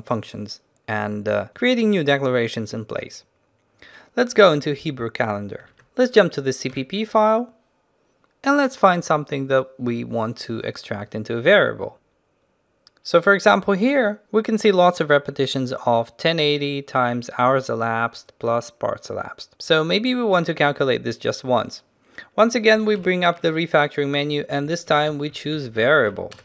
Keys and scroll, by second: 5.7 ctrl+n, 5.8 ctrl+alt+b, 6.9 ctrl+alt+b, 23.1 ctrl+alt+shift+t.